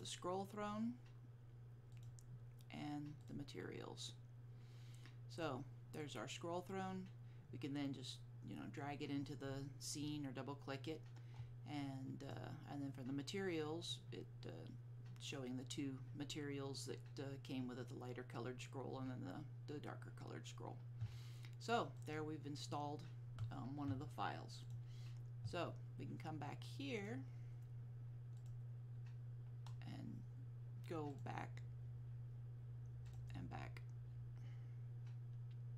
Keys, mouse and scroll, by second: 5.4 click, 12.3 click, 22.1 click, 24.7 click, 31.2 click.